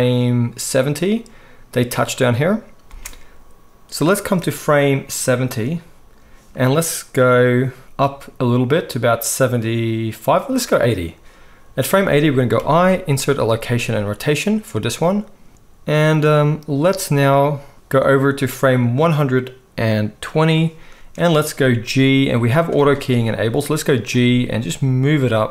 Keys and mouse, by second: 3.0 space, 12.6 i, 22.1 g, 24.1 g.